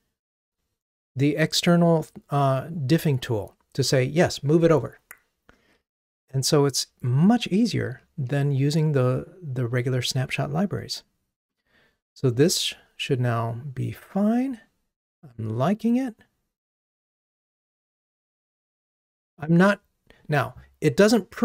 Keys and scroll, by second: 12.4 ctrl+r.